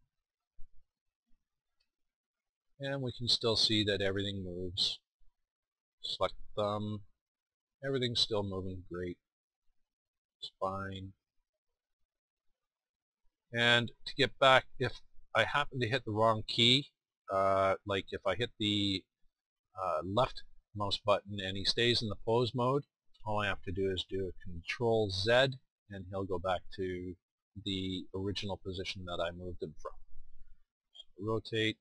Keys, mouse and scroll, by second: 1.2 r, 4.1-4.4 drag, 4.5-7.3 drag, 6.5 r, 8.6-11.4 right drag, 11.2 r, 21.5-25.2 drag, 25.2 ctrl+z, 31.2 r.